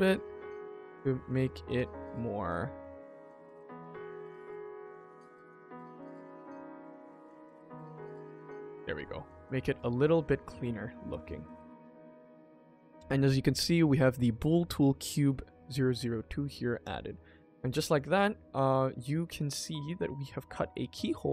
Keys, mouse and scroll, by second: 0.2 middle click, 0.5 scroll up 2, 0.9 shift+middle click, 1.3 ctrl+s, 1.6 click, 3.1 click, 3.8 click, 4.1 middle click, 4.7 scroll down 1, 4.9 shift+middle click, 5.8 click, 6.0 g, 8.5 click, 9.0 middle click, 9.7 Tab, 10.3 shift+middle click, 10.6 Tab, 10.8 click, 11.1 ctrl+s, 11.2-11.5 scroll down 1, 11.5-13.6 scroll up 1, 16.4-16.8 scroll down 2, 16.8 click, 17.1 middle click, 17.4 Tab, 17.8 click, 18.4-18.8 scroll up 2, 18.8-19.1 scroll down 3, 19.1 middle click, 19.5 middle click, 19.6-20.3 scroll down 2, 20.3 middle click, 21.1 scroll up 2.